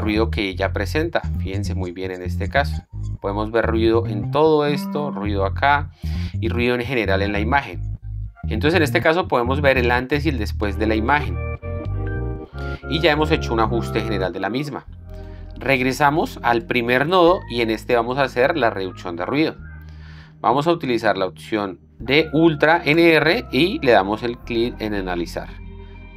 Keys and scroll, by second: 9.2 ctrl+d.